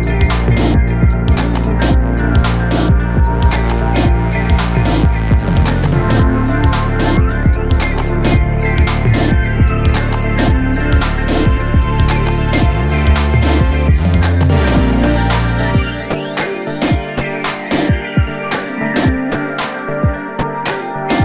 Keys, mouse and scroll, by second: 0.0-5.0 typing, 0.2 scroll down 2, 0.3 shift+middle click, 0.6 scroll up 2, 0.7 shift+middle click, 1.8 scroll down 2, 1.8 shift+middle click, 2.6 scroll up 2, 3.0 scroll down 1, 3.2 shift+middle click, 3.9 shift+middle click, 4.8-5.3 scroll down 3, 5.3 shift+middle click, 5.6 shift+middle click, 6.1-7.1 typing, 6.3 shift+middle click, 6.7 scroll down 2, 7.2 scroll up 4, 7.3 shift+middle click, 7.5-7.9 middle drag, 7.9-8.2 scroll up 1, 8.2-14.2 typing, 9.9 shift+middle click, 10.1 scroll down 2, 10.3 shift+middle click, 10.4 scroll up 2, 10.9 shift+middle click, 11.0 scroll up 1, 12.2 scroll down 2, 12.2 shift+middle click, 12.5 shift+middle click, 12.6-12.9 scroll up 1, 13.4 scroll down 2, 13.4 shift+middle click, 14.4 shift+middle click, 14.7 click, 15.6 alt+click, 15.9-20.0 typing, 17.1 scroll up 1, 18.1 scroll down 2, 18.1 shift+middle click, 18.9 shift+middle click, 19.5 shift+scroll up 1, 19.6 shift+middle click, 20.1 shift+middle click, 20.3 scroll up 1, 20.4 middle drag, 20.6 drag, 20.7 shift+middle drag.